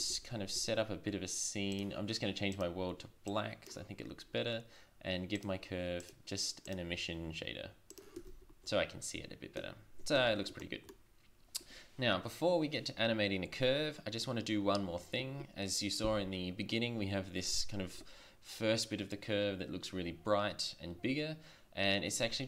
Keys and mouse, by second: 0.1 shift+z, 0.7 shift+z, 5.6-7.3 drag, 8.3 shift+z, 10.3 shift+z.